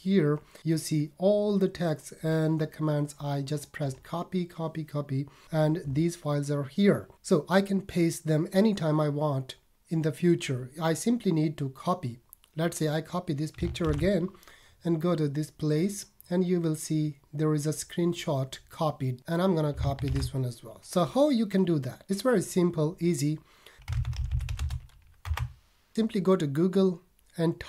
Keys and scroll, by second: 13.8 super+c, 20.0 super+c.